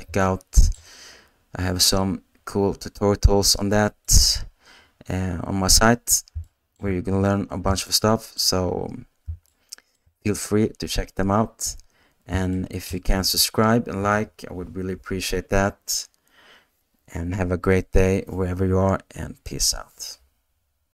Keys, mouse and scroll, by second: 0.2 shift+click, 6.4 shift+middle click, 7.9-9.3 ctrl+middle drag, 9.5 shift+middle click, 12.5 shift+click, 12.9 middle click, 13.2 space.